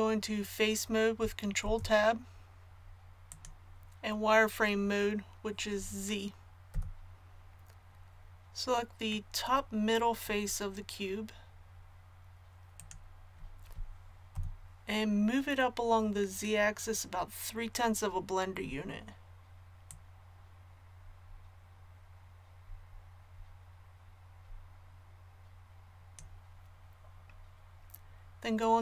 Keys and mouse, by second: 1.6 ctrl+Tab, 6.7 z, 14.3-17.7 drag, 14.3 KP_1, 19.9-26.1 drag.